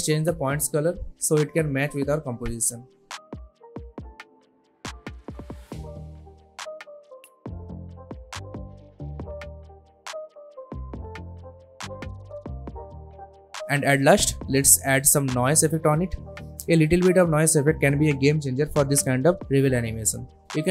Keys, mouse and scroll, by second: 8.9 space, 10.8 space, 10.9 click, 14.7-16.5 typing, 18.3-20.7 drag.